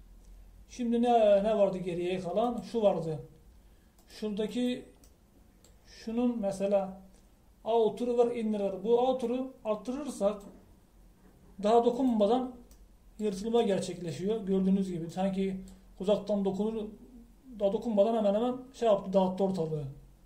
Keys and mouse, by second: 5.6-10.3 middle drag, 10.3-12.1 drag, 13.0 click.